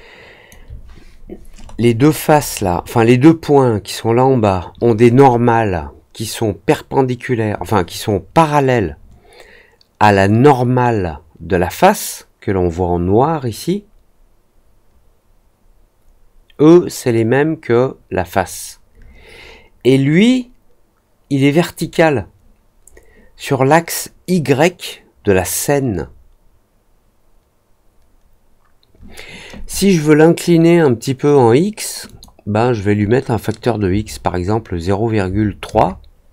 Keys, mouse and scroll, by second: 1.5-2.1 scroll up 2, 2.2 middle click, 2.5 middle click, 32.0 click.